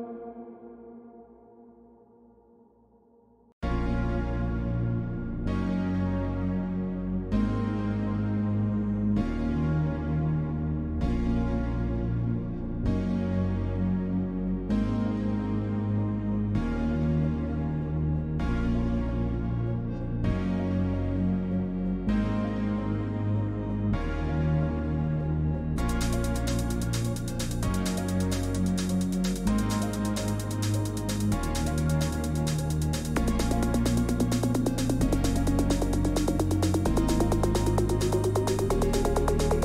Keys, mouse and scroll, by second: 0.0-5.2 typing, 0.4 middle click, 1.7-2.5 scroll down 5, 6.3-9.6 typing, 6.6 click, 8.3 right click, 9.1-10.1 right drag, 10.1 Escape, 11.6 click, 12.6 click, 17.6 alt+click, 20.4 shift+click, 21.6 click, 24.7-26.0 typing, 26.3 Return, 28.1 click, 28.8-30.9 typing, 32.6 click, 34.8 click, 34.9-35.7 typing, 36.9 middle click.